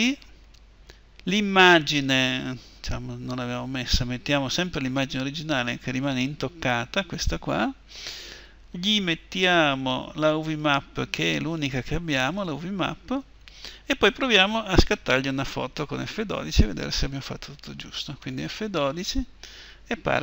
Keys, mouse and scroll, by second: 4.9-18.0 drag.